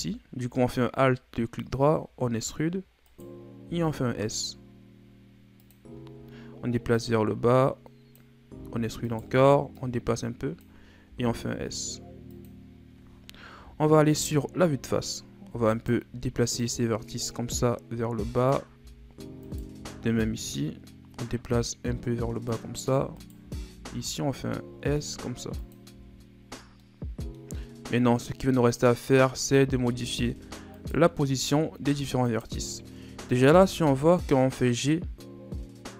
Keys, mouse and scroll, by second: 2.0 e, 5.9-6.9 shift+scroll down 2, 6.9-8.5 drag, 8.5 e, 9.7-11.0 drag, 11.0 s, 13.5 KP_1, 14.5-15.5 shift+scroll up 2, 15.7 alt+right click, 16.5-19.4 drag, 19.4 alt+right click, 20.2-23.1 drag, 23.1 alt+right click, 23.6 s, 25.9 Tab, 26.5 scroll down 5, 26.8-27.5 middle drag, 27.5 scroll up 4, 29.4 Tab, 30.0-30.7 scroll down 3, 30.7 right click, 32.2 shift+right click, 32.7 middle click, 33.6 g.